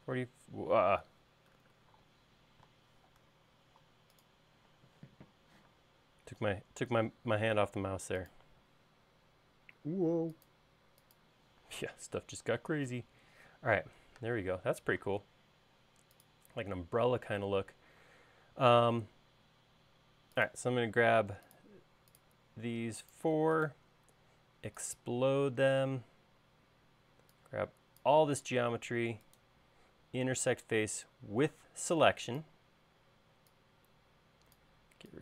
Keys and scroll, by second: 0.6-2.2 typing, 3.4 Escape, 5.8 q, 11.9 space, 33.4 e.